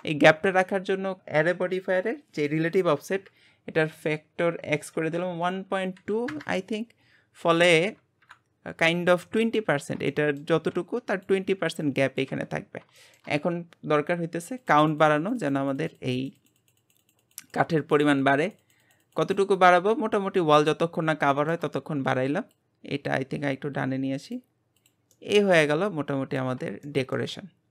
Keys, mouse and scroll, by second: 1.2-2.7 drag, 8.2 KP_1, 9.5-10.0 scroll up 2, 10.1-12.6 shift+middle drag, 12.6-13.0 scroll down 4, 13.0-14.6 shift+middle drag, 14.6-20.7 drag, 16.6 Left, 16.8 Left, 17.0 Left, 17.2 Left, 17.4 Left, 17.6 Left, 17.9 Left, 18.0 Left, 18.2 Left, 20.7-22.5 shift+middle drag, 22.5 click, 24.8 click, 25.1-27.7 middle drag.